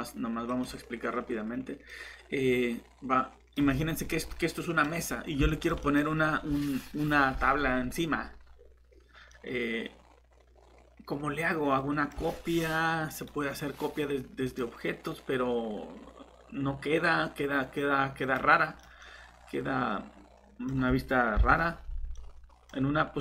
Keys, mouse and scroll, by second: 4.2 middle click, 4.9 scroll up 1, 5.5 middle click, 13.1 click, 18.8 middle click, 21.4 shift+Delete.